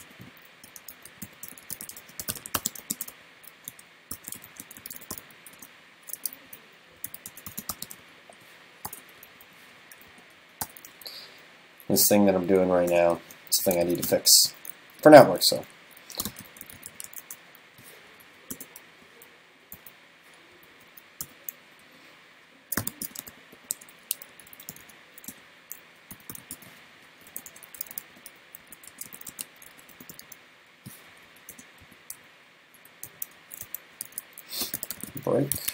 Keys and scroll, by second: 13.8 super+Right, 33.5 super+Right, 34.1 super+s.